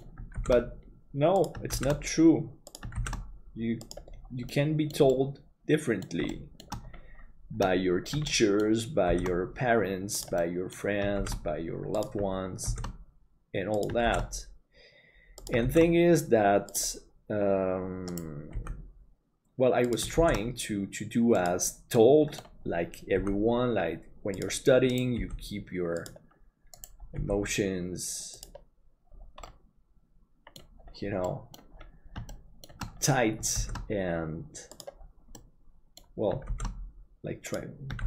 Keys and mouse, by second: 4.6 middle click, 5.1 middle click, 6.4 shift+middle click, 8.4 shift+middle click, 9.1 shift+d, 10.4 middle click, 18.5 g, 20.2 shift+d, 22.0 middle click, 23.2 g, 25.2 g, 29.6-30.6 middle drag, 31.3 middle click, 32.3 shift+middle click, 33.6 shift+d, 35.4 middle click.